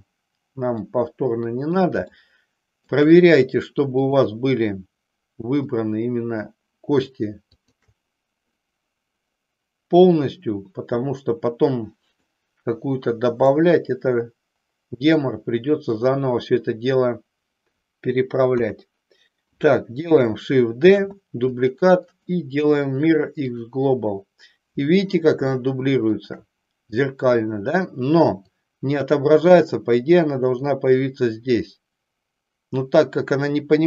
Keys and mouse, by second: 0.8-1.8 middle drag, 2.2 shift+middle click, 4.1 click, 5.6-6.6 middle drag, 7.5 shift+click, 12.2-13.6 middle drag, 18.4 KP_1, 20.9 shift+d, 25.6 shift+middle click, 28.5-30.6 drag.